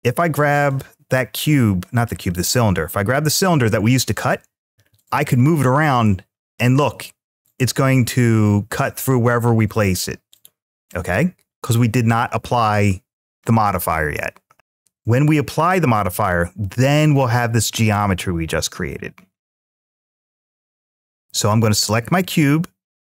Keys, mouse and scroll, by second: 0.5-3.3 drag, 4.6 g, 10.1-11.3 right drag, 20.7-21.9 drag.